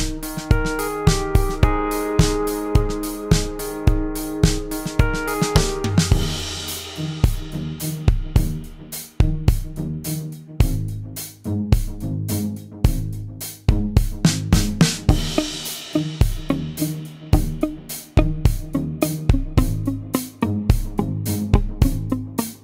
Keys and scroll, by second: 0.7 space, 1.3 shift+F6, 4.5 F1, 6.2-6.6 typing, 7.1 shift+F6, 9.8 F1, 11.0 shift+F6, 16.9 F1, 17.3 typing, 20.7 g.